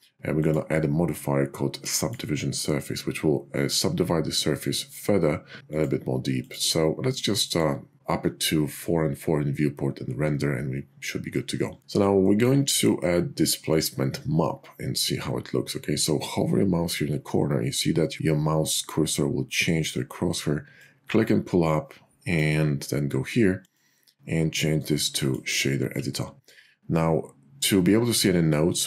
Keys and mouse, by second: 5.8 click, 6.7 click, 7.8 click, 20.7-22.5 drag, 23.7-25.3 drag.